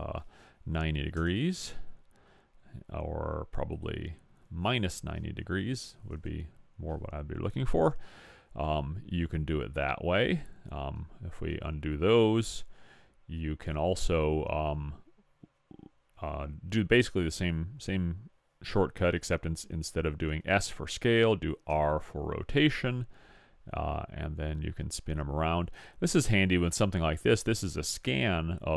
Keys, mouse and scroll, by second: 3.8 click, 5.5 middle click, 9.2-11.6 middle drag, 11.0 ctrl+z, 11.6 ctrl+z, 12.9-14.8 middle drag, 21.7 r.